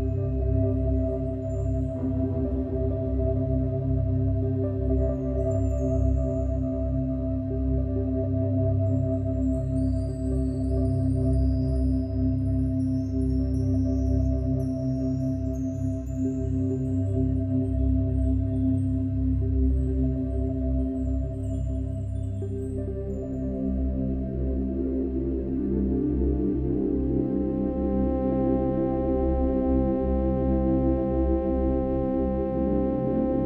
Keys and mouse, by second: 1.9 shift+d, 11.8 ctrl+s, 14.0-16.4 drag, 18.8 ctrl+alt+click, 21.1-21.6 drag, 22.3 click, 24.6 click, 26.3 click, 29.8-30.9 drag, 31.2-33.4 drag.